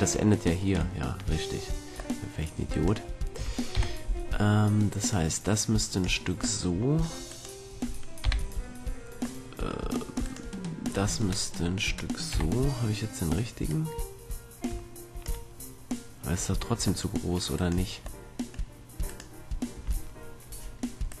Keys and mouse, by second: 0.6 middle click, 1.2-2.8 middle drag, 2.8-4.8 drag, 3.9 KP_3, 5.2-6.8 drag, 6.8 middle click, 7.4-8.4 middle drag, 8.4 KP_3, 9.3 middle click, 11.8 middle click, 12.4 KP_3, 17.7-19.2 middle drag, 19.2-21.2 right drag.